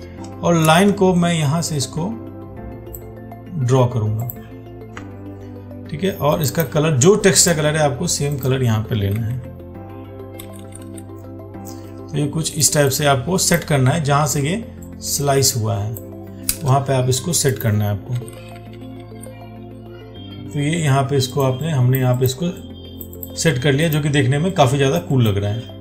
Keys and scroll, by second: 14.5 ctrl+t.